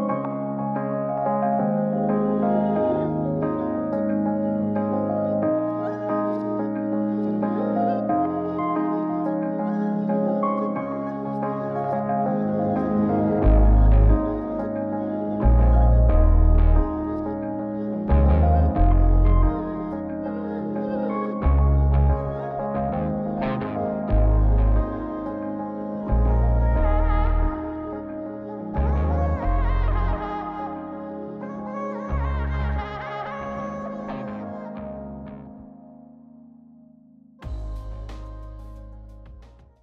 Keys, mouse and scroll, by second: 0.8 click, 2.0 click, 3.7 click, 4.6 click, 5.3-6.2 scroll up 1, 6.2-9.0 drag, 9.1-11.6 drag, 12.8 click, 14.5 click, 17.5 click, 18.8-21.2 drag, 21.4-23.6 drag, 24.5 click, 25.3 Right, 26.0 Left, 27.3 Right, 27.3 Left, 29.2-30.6 drag.